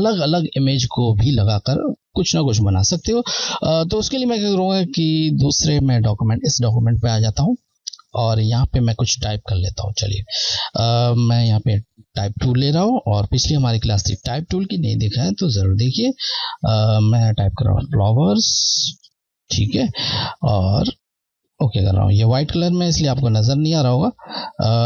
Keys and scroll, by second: 5.6 Left, 9.4 Left, 13.7 BackSpace, 16.6-18.4 typing, 21.8 Left.